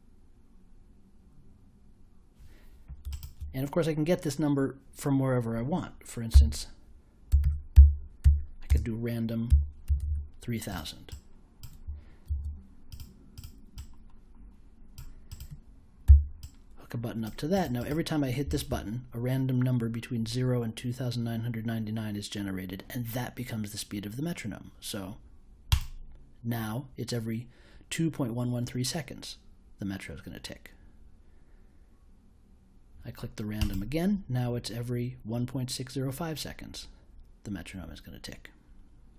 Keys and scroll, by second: 6.3-9.8 typing, 12.2 super+j, 16.0 b.